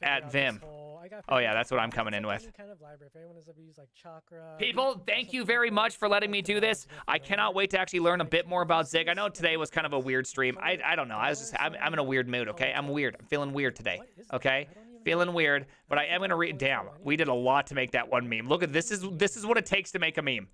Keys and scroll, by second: 0.0-1.0 typing, 1.2 ctrl+c, 1.5 ctrl+v, 1.9 Return.